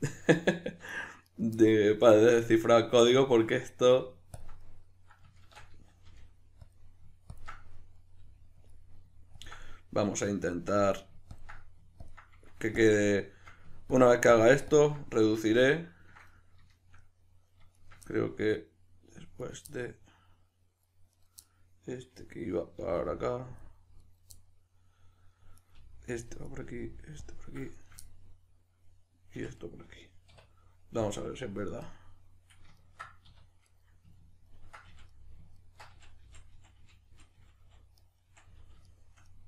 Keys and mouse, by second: 1.3 right click, 1.6-4.4 middle drag, 4.4 ctrl+drag, 4.6-6.8 middle drag, 5.4 shift+Tab, 6.8 click, 7.3 ctrl+drag, 7.6-9.4 middle drag, 8.2 g, 8.7 click, 9.4 ctrl+drag, 9.6-10.4 middle drag, 10.4-10.8 ctrl+drag, 10.8-11.4 middle drag, 11.4-13.2 ctrl+drag, 13.2-13.9 shift+middle drag, 13.9-15.1 ctrl+drag, 15.1-17.8 middle drag, 17.8 shift+right click, 18.1-19.4 middle drag, 19.4 right click, 19.7-21.1 middle drag, 21.1 right click, 21.4-23.6 middle drag, 22.7 g, 23.6 click, 24.0 right click, 24.3-25.5 middle drag, 25.5 right click, 25.7 g, 26.3 click, 26.4 right click, 26.6 g, 27.3 click, 27.7 shift+right click, 28.0-33.7 middle drag, 29.3 f, 30.3 \, 31.2 KP_Decimal, 33.3 2, 33.7 right click, 34.2-39.4 ctrl+middle drag, 34.9 f, 35.9 f, 38.3 f.